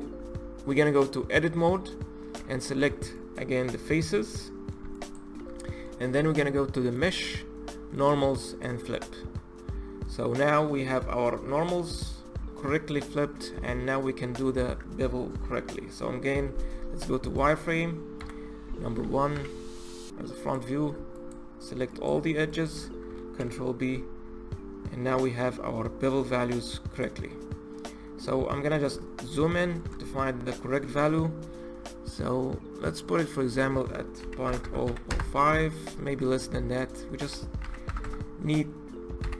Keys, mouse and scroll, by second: 0.1 Tab, 2.2 3, 2.7 click, 3.8-4.8 middle drag, 4.8 shift+click, 5.5-6.8 middle drag, 6.8-8.9 drag, 9.2-12.4 middle drag, 13.4-16.4 middle drag, 16.4 z, 18.0 KP_1, 19.2 2, 19.6 click, 20.2 click, 21.0 shift+click, 21.8 shift+click, 22.4 shift+click, 23.2 ctrl+b, 28.2-28.9 scroll up 5, 28.9-29.9 shift+middle drag, 29.9-30.9 scroll up 9, 30.9-31.5 scroll up 1, 32.7-34.5 drag, 34.5 KP_0, 36.6-37.8 drag, 37.8 KP_0.